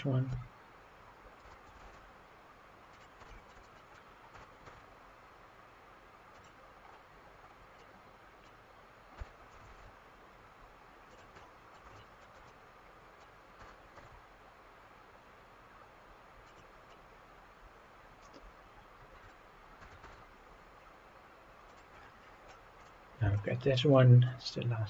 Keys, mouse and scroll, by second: 0.3 f, 1.4 g, 1.8 shift+z, 2.9 drag, 3.3 shift+middle drag, 3.6-4.0 middle drag, 4.3 g, 4.6 z, 6.8-7.8 scroll up 7, 7.8-8.5 middle drag, 9.2 g, 9.7 shift+z, 11.1 drag, 11.4-11.7 middle drag, 12.0 shift+middle drag, 12.5-13.2 middle drag, 13.6 g, 13.9 z, 16.5-16.9 drag, 16.9-19.3 middle drag, 19.8 g, 21.7 click, 21.9 scroll down 2, 22.8 click, 23.3 shift+middle click, 23.9-24.3 middle drag, 24.4 scroll down 2.